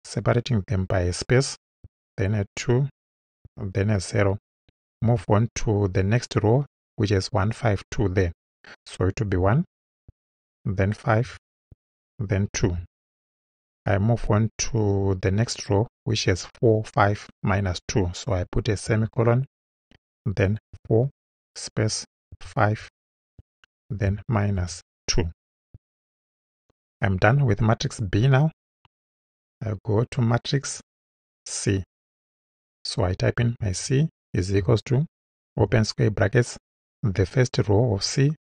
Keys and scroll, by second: 1.8 2, 2.5 space, 3.4 0, 5.0 ;, 9.4 1, 11.7 space, 12.6 2, 18.9 ;, 20.7 4, 21.3 space, 22.3 5, 23.3 space, 24.6 2, 29.3 Return, 33.4 shift+c, 34.6 =.